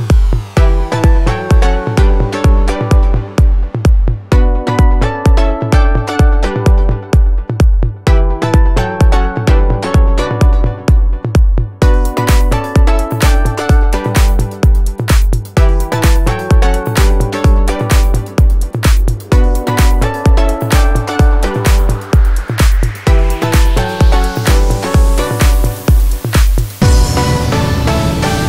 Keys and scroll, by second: 3.2-4.1 typing, 8.0 space, 11.7 space, 12.5 Escape, 12.7 space, 14.3 space, 20.4 space, 21.6 b, 22.0 o, 22.2 Return, 24.4 space, 25.7 Escape.